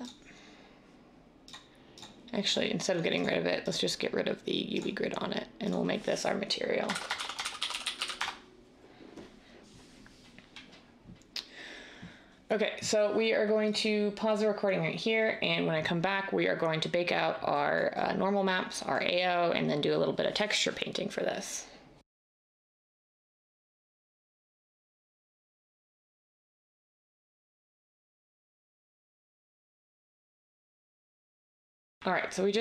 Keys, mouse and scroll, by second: 6.9-8.1 typing, 8.2 Return, 10.1 typing.